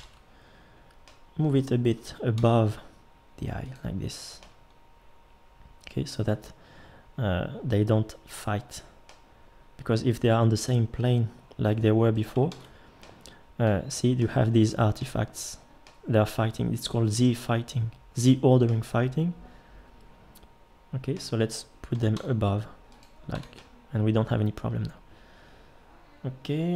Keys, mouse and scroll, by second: 0.0 ctrl+l, 1.9 g, 11.7 g, 12.5 ctrl+z, 17.9 middle click, 21.9 g, 23.3 Tab.